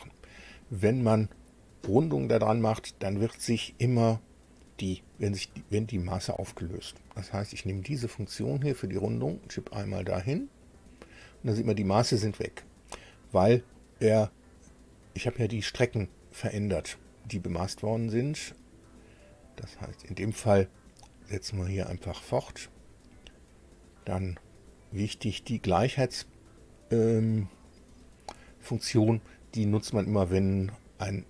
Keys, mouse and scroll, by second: 8.4 click, 10.6 click, 18.3 click, 20.1 click, 21.8 click, 22.7 right click, 24.0 click, 25.2 click, 26.5 click, 27.7 click.